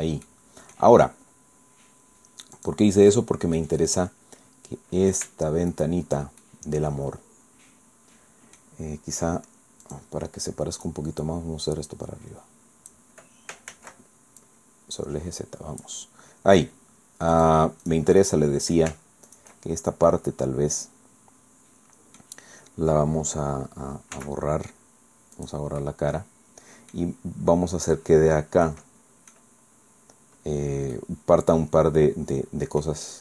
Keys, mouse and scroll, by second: 0.2 click, 1.0 scroll down 1, 2.6 click, 3.0 click, 3.6-5.3 middle drag, 5.7 shift+right click, 6.4-8.8 shift+middle drag, 9.8 click, 10.8 right click, 11.2-13.1 drag, 13.7 ctrl+z, 14.4-16.0 drag, 17.3 click, 17.8 click, 18.2 click, 18.9 shift+middle click, 19.3 shift+click, 19.7 shift+scroll down 1, 20.1-21.1 drag, 21.1-22.4 middle drag, 24.2 x, 25.4 click, 25.8-27.0 drag, 27.0 scroll up 1, 27.2-27.6 scroll down 1, 27.8-28.1 scroll up 1, 28.6 click, 29.6-30.0 scroll up 1, 30.0 scroll down 1, 30.2-30.7 scroll up 1, 31.0-32.2 drag, 32.2 scroll down 1, 33.1 scroll down 1.